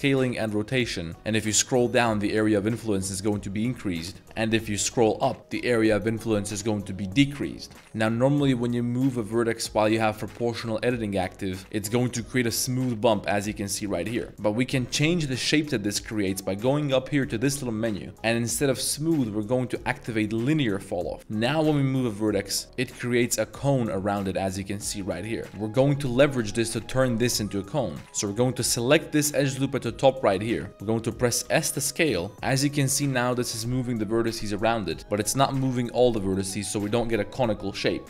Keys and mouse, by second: 0.1 r, 1.1 z, 7.8 z, 11.8 click, 12.1 middle drag, 13.6 middle click, 14.3 ctrl+z, 15.8-21.2 drag, 21.2 middle click, 21.4 g, 21.6 z, 23.8 click, 24.3 middle click, 25.4 shift+middle click, 25.5 Tab, 26.2 middle click, 28.5 alt+click, 30.0 shift+middle click, 30.4 shift+middle click, 30.7 s, 31.4 s.